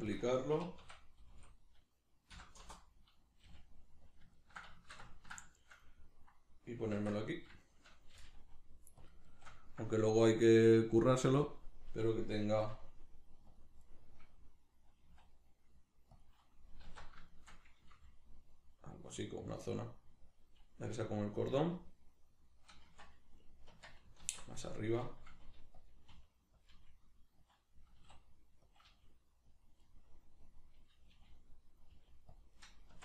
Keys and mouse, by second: 0.2 click, 0.6 r, 4.2 click, 4.4-9.1 ctrl+middle drag, 7.0 alt+q, 8.2 g, 9.1 shift+click, 9.3-13.6 shift+middle drag, 12.6 r, 13.6 click, 13.8-16.2 middle drag, 15.0 s, 16.2 click, 16.9 alt+q, 17.3-19.2 shift+middle drag, 18.0 g, 19.2 click, 19.4-21.5 middle drag, 20.9 g, 21.5 click, 21.7-25.9 middle drag, 22.9 Tab, 23.7 Tab, 24.2 alt+q, 25.3 g, 25.9 click, 26.1 r, 27.5 click, 28.0 s, 28.8 click, 28.9 g, 29.6 click, 29.8-31.8 middle drag, 31.1 g, 31.8 click, 31.9 g, 32.4 click, 32.6 middle click, 32.9 Tab.